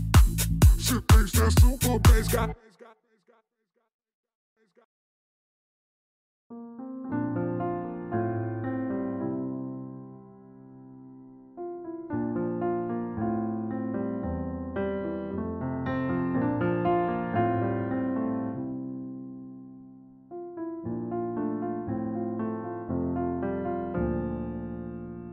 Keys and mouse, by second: 0.5 click, 1.6-3.0 drag, 3.5 middle click, 3.8 click, 4.2-4.6 drag, 5.2 shift+middle click, 5.7 click, 6.0 middle click, 7.0 click, 7.5 middle click, 8.0 click, 10.9 click, 11.7-13.0 drag, 12.2 0, 13.4-14.5 drag, 15.5 click, 15.9 click, 16.4 click, 16.8 shift+a, 18.1 click, 18.8 click, 19.7 click, 20.4-23.0 drag, 23.4-25.2 drag.